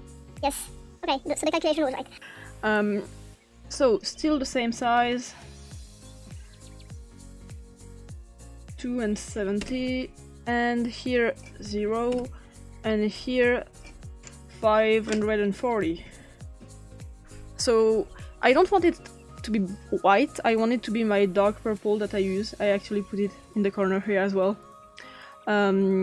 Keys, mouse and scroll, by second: 0.3 ctrl+scroll down 1, 0.9-1.6 ctrl+scroll down 1, 3.7 click, 4.6-6.7 typing, 7.4 click, 8.5-10.1 typing, 11.1 click, 11.6-12.4 typing, 13.4 click, 15.8-16.2 typing, 16.5 Return, 20.7 click, 23.8 click.